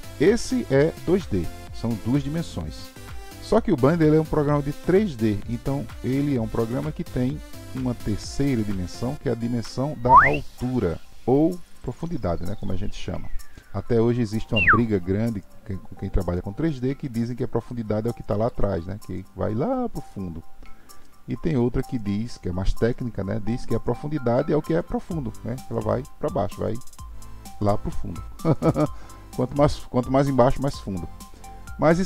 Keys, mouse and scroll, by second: 5.7-8.7 middle drag, 9.4 click, 11.1 click, 17.7-20.7 middle drag, 21.0-23.6 middle drag, 23.6 click, 31.3-32.0 middle drag.